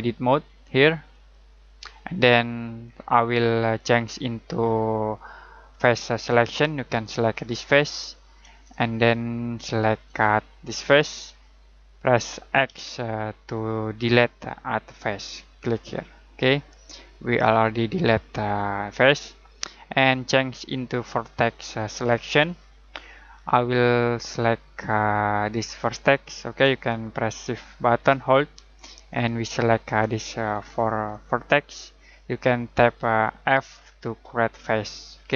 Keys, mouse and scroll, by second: 2.4-2.8 scroll down 1, 2.8-5.1 scroll up 1, 5.6 click, 7.5 right click, 8.9 middle click, 10.8 shift+right click, 11.4 middle click, 12.6 x, 15.5 click, 16.5 middle click, 22.0 click, 23.4-23.9 scroll down 1, 23.9-24.3 scroll up 1, 25.7 right click, 27.9 shift+right click, 29.1 shift+right click, 30.5 shift+right click, 34.2 f.